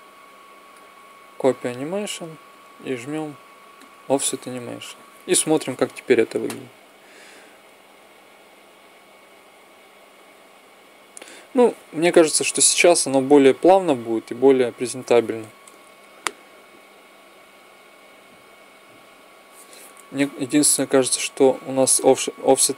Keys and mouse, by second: 1.6-5.1 drag, 5.4 Right, 11.8 Left, 14.8 alt+a.